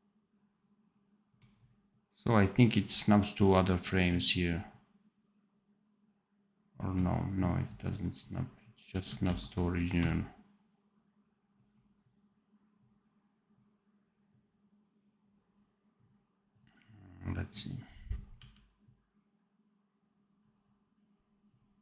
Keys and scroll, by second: 9.1 ctrl+z, 18.3 d.